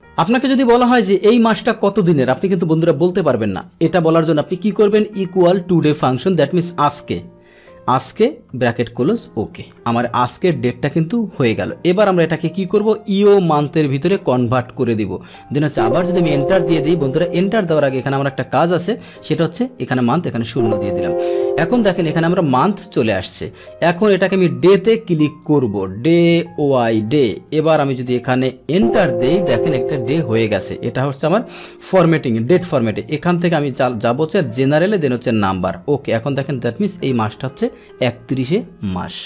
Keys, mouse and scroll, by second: 3.1 click, 6.0 BackSpace, 6.9 BackSpace, 7.8 Tab, 9.3 Return, 12.1 click, 14.7 Tab, 15.7 ctrl+Return, 16.3 ctrl+Return, 17.7 click, 20.5 ctrl+Return, 21.4 ctrl+Return, 22.6 click, 24.1 click, 24.3 click, 25.4 click, 26.8 Tab, 28.8 ctrl+Return, 29.3 ctrl+Return, 31.9 ctrl+1, 34.3 click, 35.4 click.